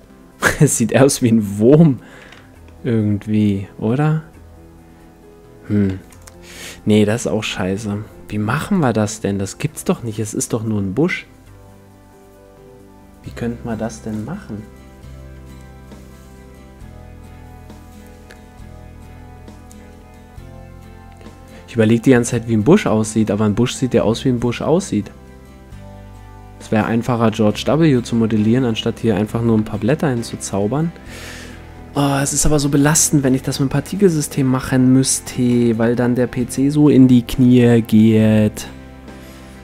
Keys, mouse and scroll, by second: 2.4 Tab, 2.6-5.0 middle drag, 5.9 x, 8.9-10.5 drag, 22.8-24.6 right drag, 29.6 KP_1, 30.2 a.